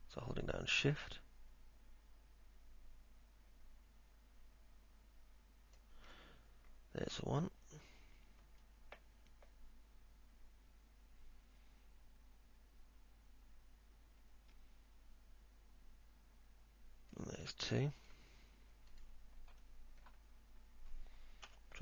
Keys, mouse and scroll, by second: 8.8-17.4 shift+drag, 19.8 alt+middle click, 21.6 p.